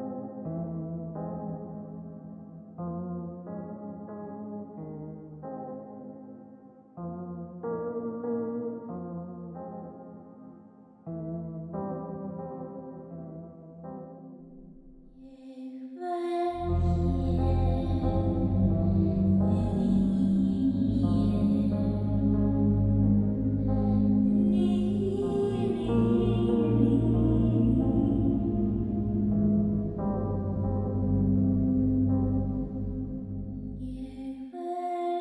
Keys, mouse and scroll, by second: 35.1 click.